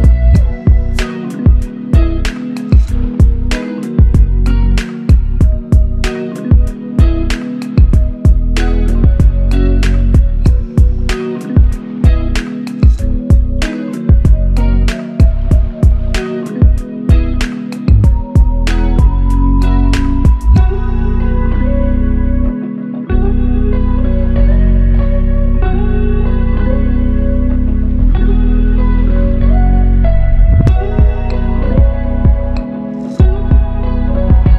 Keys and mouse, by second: 11.7 ctrl+alt+click, 12.8 alt+shift+click, 17.4 typing, 17.6 Return, 20.4 typing, 20.5 alt+click, 22.9 alt+shift+click, 23.6-23.9 typing, 27.9 alt+click, 29.8 ctrl+z, 30.3 ctrl+z, 30.9 ctrl+z, 34.1 r.